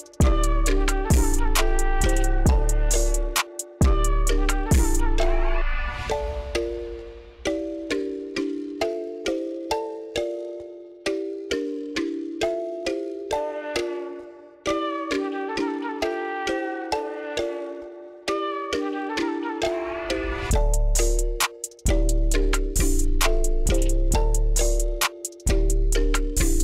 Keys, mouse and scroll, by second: 0.3 scroll up 1, 1.8-2.6 middle drag, 4.5 middle click, 5.2 middle click, 6.3 middle click, 7.4 click, 7.6 scroll up 1, 8.9-9.9 drag, 10.1 middle click, 11.8-14.1 drag, 14.4 middle click, 14.6 click, 15.1 middle click, 15.7 scroll up 2, 16.0-16.8 middle drag, 17.0 shift+middle click, 17.5 shift+click, 18.1 shift+middle drag, 18.6 scroll up 2, 19.0 shift+middle click, 19.5-19.9 shift+middle drag, 20.1 shift+middle click, 20.2 shift+middle click, 20.4 shift+middle click, 21.0 shift+middle click, 21.4-21.8 shift+middle drag, 22.5-24.8 shift+drag, 25.0 shift+middle click, 25.5 shift+middle click, 26.0-26.6 shift+middle drag.